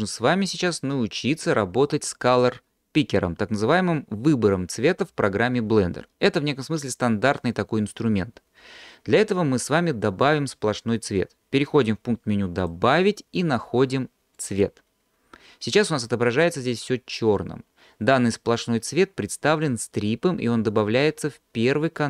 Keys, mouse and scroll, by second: 12.6-14.6 drag.